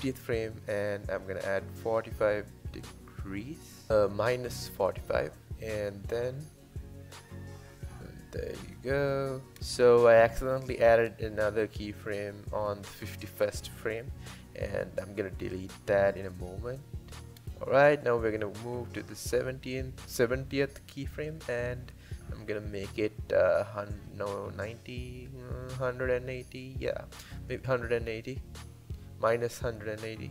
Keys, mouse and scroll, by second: 0.1-3.3 drag, 3.9 Left, 4.2-7.2 drag, 7.2 space, 9.5 space, 12.2-15.3 drag.